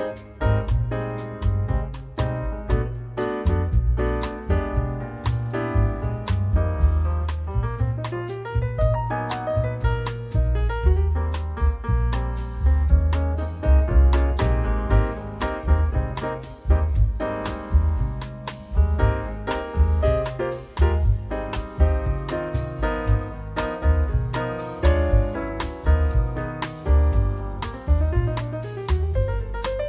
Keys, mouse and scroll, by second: 0.6-2.5 drag, 2.8 click, 4.7 click, 5.9 9, 6.2 0, 7.2-9.4 drag, 9.6 click, 10.7 click, 11.2 scroll down 1, 11.6-11.9 scroll up 1, 12.5 click, 13.8 click, 14.3 click, 15.0 click, 15.4 click, 17.5 scroll up 1, 18.8 click, 21.4 click, 24.2 click, 25.2 scroll down 1, 26.1 scroll up 1, 28.6 click.